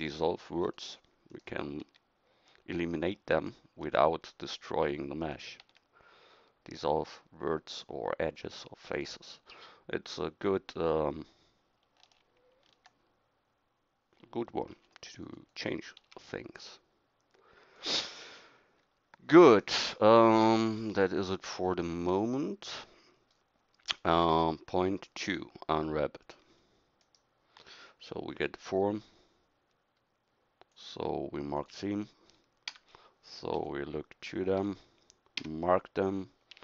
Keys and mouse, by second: 1.8 x, 5.6 x, 14.7 ctrl+r, 16.0 s, 23.4-30.7 middle drag, 32.7 a, 33.6 KP_1, 35.4 a.